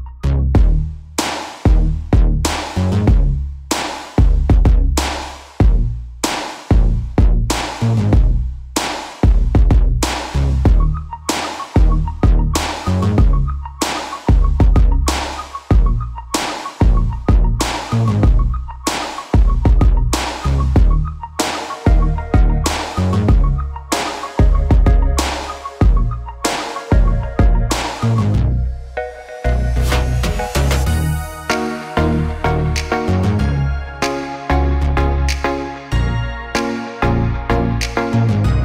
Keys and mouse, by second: 1.6 ctrl+KP_3, 2.0 ctrl+KP_3, 3.1 shift+g, 5.8 Tab, 6.4 Tab, 8.1 f, 9.1 i, 12.2 x, 14.2 Tab, 14.6 ctrl+s, 15.6 shift+KP_3, 16.3 Tab, 16.4 a, 17.1 g, 19.7 2, 20.5 alt+z, 20.7 alt+z, 21.1 KP_3, 22.0 e, 23.1 s, 24.2 alt+z, 27.7 KP_3, 28.0 e, 29.7 alt+z, 29.7 KP_3, 29.9 alt+z, 30.7 g, 31.8 KP_1, 32.0 alt+z, 32.3 g, 32.6 s, 35.6 f, 36.5 ctrl+r, 37.2-38.6 middle drag, 37.5 2, 38.4 alt+shift+s.